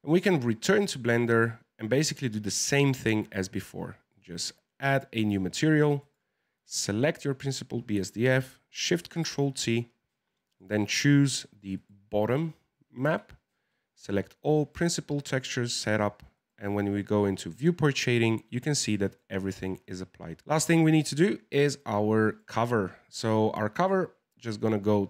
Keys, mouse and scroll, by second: 0.3 click, 4.1 click, 4.8 click, 5.6-6.0 middle drag, 6.0 click, 6.6 click, 9.0 ctrl+shift+t, 18.5 click, 18.9-22.2 middle drag, 22.2 click, 24.6-25.0 drag.